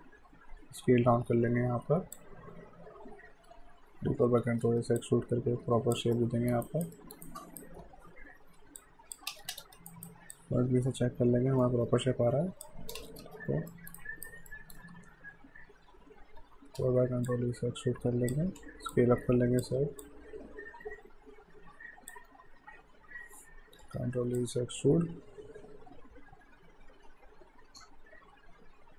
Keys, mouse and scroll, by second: 4.2 ctrl+e, 5.0 click, 6.2 alt+middle click, 6.6 alt+right click, 6.9 alt+middle click, 7.2 alt+right click, 8.8 click, 9.3 space, 9.9 alt+right click, 10.3 alt+click, 13.0 space, 13.7 alt+middle click, 14.0 alt+right click, 14.5 alt+middle click, 16.4 ctrl+e, 17.3 click, 18.5 r, 18.9 click, 19.8 w, 20.0 click, 23.4 ctrl+e, 24.4 click.